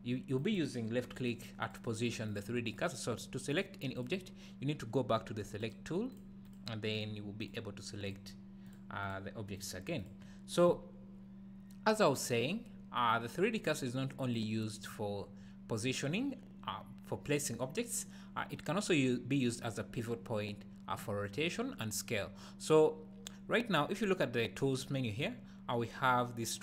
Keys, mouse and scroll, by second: 1.1 click, 1.6 click, 1.9 click, 2.3 click, 3.5 click, 3.9-5.8 drag, 6.1 click, 6.4 click, 6.9 click, 7.4 click, 8.0 click, 8.6 click, 9.0 click, 9.6 click, 10.0 click, 14.2 click, 14.8 click.